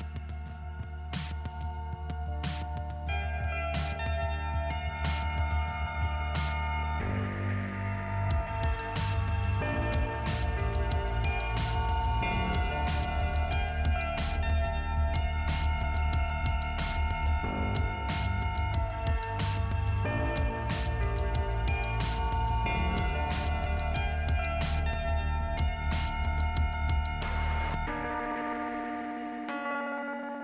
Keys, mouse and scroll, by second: 1.7-3.0 scroll up 2, 3.4-4.4 scroll down 2, 4.4 click, 8.7 p, 11.8 middle click, 12.7-13.4 scroll down 1, 15.0 click, 15.5 click, 16.3 Return, 17.9 click, 18.2 click, 18.3 double click, 18.7 double click, 20.2 click, 21.6 k, 22.5-23.6 scroll up 2, 24.1 click, 25.6 click, 26.2 click, 26.8 click, 29.6 click, 30.1 double click, 30.3 double click.